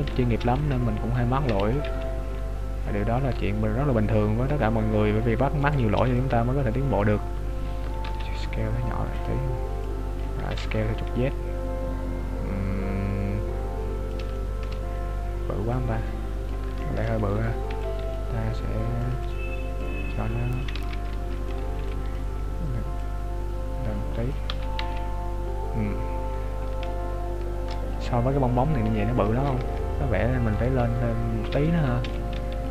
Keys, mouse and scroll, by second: 0.1 right click, 0.3 b, 1.5 e, 1.8 s, 5.6 right click, 5.9 b, 8.0 s, 9.9 click, 10.5 s, 14.3 shift+middle click, 15.7 click, 16.8 shift+middle click, 17.3 right click, 17.7 b, 19.1 click, 20.7 ctrl+z, 21.5 right click, 21.8 b, 23.0 click, 24.6 Tab, 24.8 z, 25.7-26.9 scroll down 13, 26.9 shift+middle click, 27.9-28.3 scroll up 2, 29.5 scroll up 8, 29.5 KP_3, 30.3-30.7 scroll up 1, 30.7 right click, 30.9 Tab, 31.6 right click, 32.1 b.